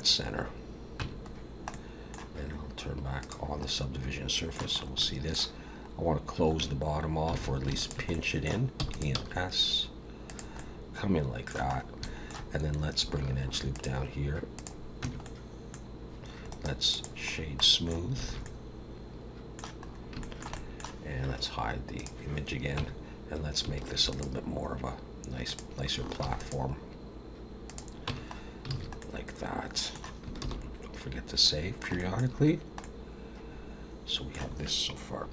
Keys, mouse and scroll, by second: 1.0 Tab, 1.3 scroll down 3, 1.7 middle click, 3.2 click, 3.6 middle click, 4.8 scroll up 2, 5.0 middle click, 6.6 Tab, 7.3 alt+a, 7.8 alt+shift+click, 8.1 middle click, 8.8 e, 9.2 s, 10.6 middle click, 11.7 scroll up 1, 12.0 shift+middle click, 13.4 ctrl+r, 15.0 Tab, 15.2 middle click, 15.9-16.4 scroll down 1, 16.5 right click, 17.3 scroll down 2, 17.6 middle click, 18.2 alt+a, 18.4 middle click, 19.9-20.2 scroll up 2, 20.2 shift+middle click, 20.5 middle click, 22.0 click, 22.8 Tab, 23.9 ctrl+r, 26.2 ctrl+r, 28.1 Tab, 28.3-28.6 scroll down 2, 28.7 alt+a, 29.0 middle click, 31.0 ctrl+s, 31.5 scroll down 2, 31.9 shift+middle click, 32.5-32.8 scroll down 1, 32.8 middle click.